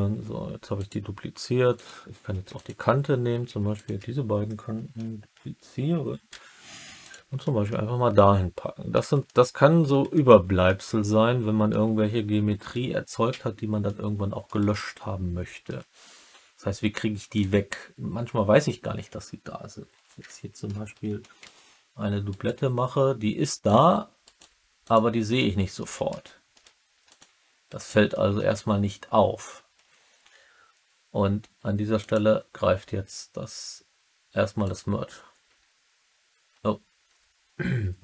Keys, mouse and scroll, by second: 0.7 click, 1.7 click, 2.0-2.7 typing, 2.5 click, 3.7 shift+click, 6.2 shift+d, 6.9 click, 7.6 middle click, 8.5 alt+click, 9.2 alt+middle click, 10.0 alt+middle click, 11.6 alt+middle click, 13.8 alt+middle click, 14.6 alt+click, 21.3 shift+d, 22.2 right click, 23.6 click, 24.2 middle click, 24.3 right click, 24.8 click, 25.3 alt+click, 26.1 alt+middle click, 27.0 click, 28.0 alt+middle click, 31.9-34.8 drag.